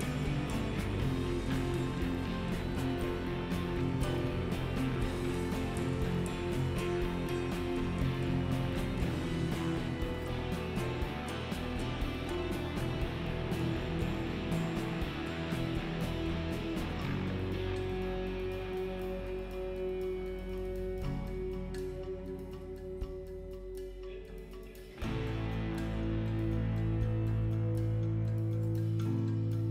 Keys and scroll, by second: 4.0 l, 18.6 ctrl+z.